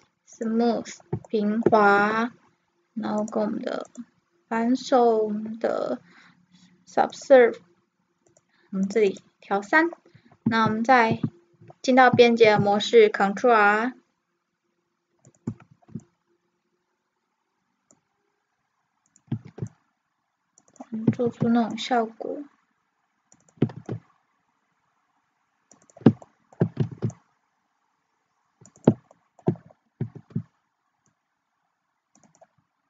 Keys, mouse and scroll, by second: 0.5-2.0 drag, 1.3 middle click, 1.5 middle click, 1.7 middle drag, 2.0 t, 2.1-3.2 drag, 3.2-5.7 drag, 8.3-11.1 drag, 11.1 Tab, 12.5 ctrl+r, 15.5-18.9 drag, 15.7 ctrl+r, 19.5 ctrl+r, 21.3 ctrl+r, 23.8 ctrl+r, 26.3-28.1 middle drag, 27.0 ctrl+r, 28.9-30.9 drag, 30.2 ctrl+r, 30.9-32.3 middle drag.